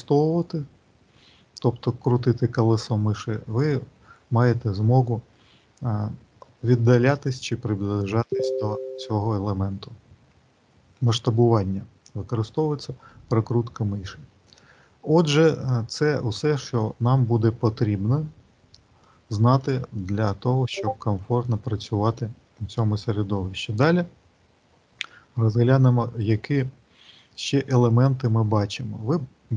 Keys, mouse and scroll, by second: 0.3-0.7 scroll down 1, 1.5-2.9 scroll down 3, 2.2-2.9 scroll up 1, 2.9 scroll down 1, 3.2-4.3 scroll down 2, 3.7-4.3 scroll up 1, 4.3-5.4 scroll down 1, 6.2-6.6 scroll down 1, 7.0-7.9 scroll up 3, 7.9 scroll down 1, 8.2-9.3 scroll down 2, 9.3 scroll down 1, 9.5-10.0 scroll up 2, 10.0 scroll down 1, 10.2-10.7 scroll down 1, 17.7-18.9 scroll up 2, 18.9 middle click, 19.8 shift+middle click.